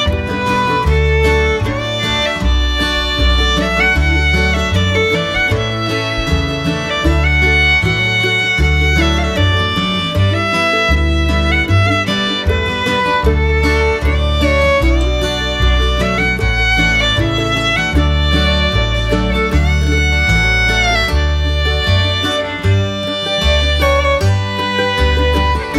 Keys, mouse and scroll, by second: 1.3 shift+click, 2.6 shift+click, 3.4 click, 4.3 click, 4.8 middle click, 5.6 shift+middle click, 6.0 middle click, 6.6 middle click, 7.5 middle click, 8.1 shift+middle drag, 9.9 shift+middle click, 10.3-12.6 middle drag, 12.9 shift+middle click, 13.2 middle click, 13.8 shift+middle click, 14.8 middle click, 16.7 middle click, 18.0 middle click, 19.6-21.5 drag, 24.9 shift+middle click.